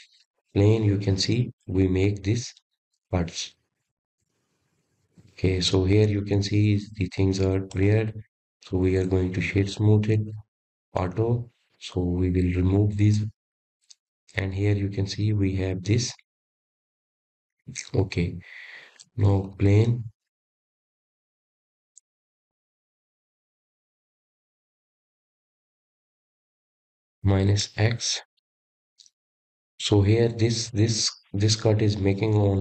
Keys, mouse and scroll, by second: 2.4 click, 4.7 click, 5.5-8.4 middle drag, 8.4-8.8 scroll up 4, 9.1-9.6 scroll down 1, 9.6-12.2 middle drag, 12.2-15.3 right drag, 15.4 click, 16.2-21.2 middle drag, 24.0 click, 24.7-27.4 middle drag, 27.4 click, 28.8 KP_1, 32.0 click.